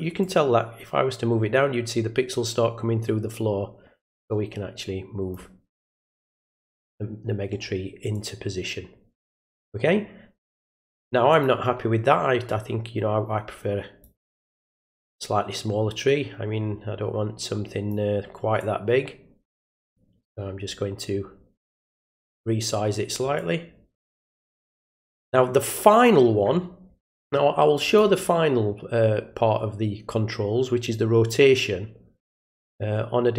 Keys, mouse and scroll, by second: 0.2 click, 6.1-7.5 middle drag, 8.1-10.6 drag, 11.3 click, 12.4-14.0 drag, 14.7-17.9 drag, 18.6-19.8 drag, 22.1 click, 23.3-27.9 drag, 31.3-33.3 drag.